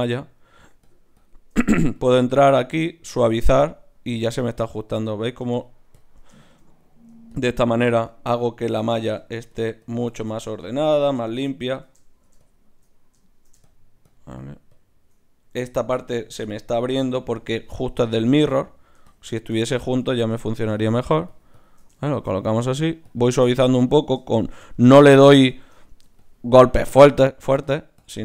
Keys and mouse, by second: 9.0-15.5 middle drag, 13.8-16.5 drag, 13.8-15.5 right drag, 16.1 ctrl+z, 16.5-28.2 middle drag, 19.1-25.0 drag, 19.1-28.2 right drag, 25.1-28.2 drag.